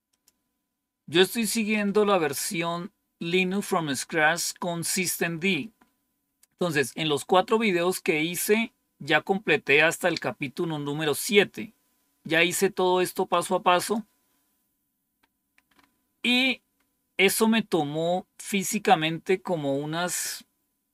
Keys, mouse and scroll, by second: 0.0 click, 5.6-6.4 scroll down 2, 7.2-8.6 scroll down 2, 8.6-9.6 scroll down 1, 9.6-10.4 scroll down 1, 11.2-13.3 drag, 13.8 click, 15.1-17.5 scroll up 3, 17.5-18.4 scroll down 2, 18.4-19.4 scroll down 1.